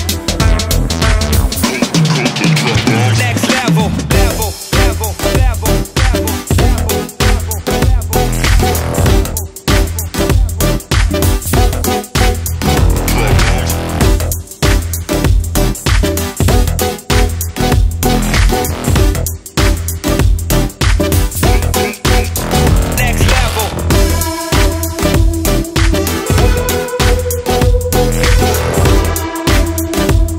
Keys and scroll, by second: 1.9 ctrl+z, 17.4 ctrl+z.